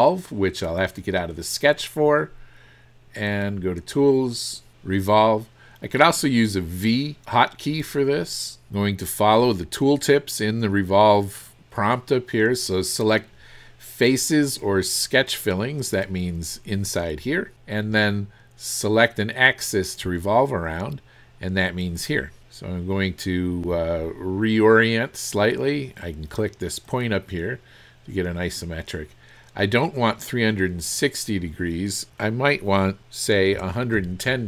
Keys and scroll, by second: 33.6 KP_1.